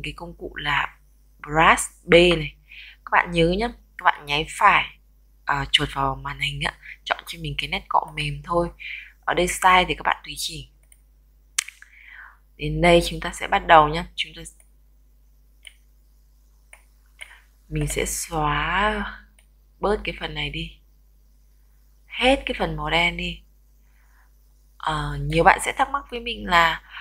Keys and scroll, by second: 2.2 b.